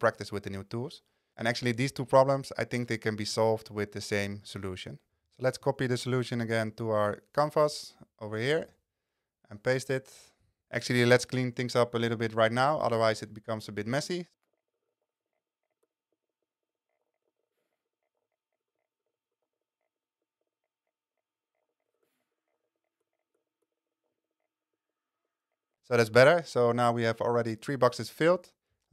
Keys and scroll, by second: 5.3 super+c, 8.7 super+v, 13.7 super+x, 14.7 super+Down, 14.8 Return, 14.9 super+v, 15.0 super+a, 17.0 super+a, 17.2 super+x, 17.4 Right, 17.5 Return, 17.6 super+v, 18.2 super+a, 18.4 super+x, 19.0 Return, 19.1 super+v, 19.4 super+a, 21.6 super+a, 21.9 super+x, 21.9 super+Right, 22.1 super+v, 22.5 super+a, 22.7 super+x, 23.3 Return, 23.4 super+v, 24.1 super+a.